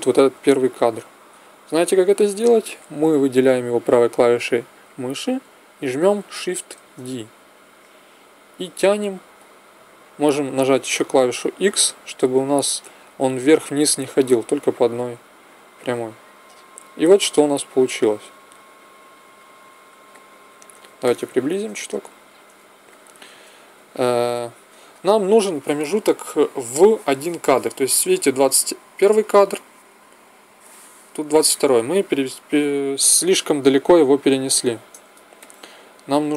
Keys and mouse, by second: 4.8 middle click, 6.7 shift+d, 20.0-29.8 middle drag, 35.3-36.3 middle drag.